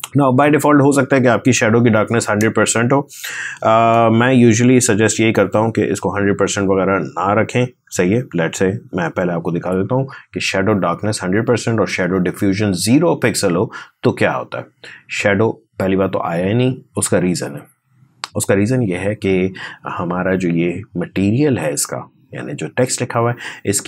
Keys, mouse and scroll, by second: 3.2 BackSpace, 4.5 1, 8.7 0, 10.4 click, 13.7 click, 19.8 click.